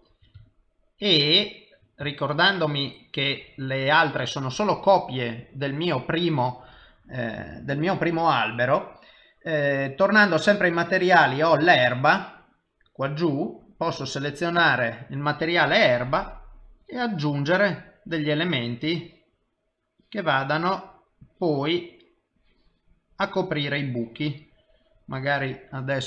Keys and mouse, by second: 0.7 ctrl+middle click, 2.5 ctrl+middle click, 10.2 click, 12.2 click, 15.7 click, 16.8 click, 18.9 click, 20.2 click, 21.2 click, 23.4 click, 24.1 click.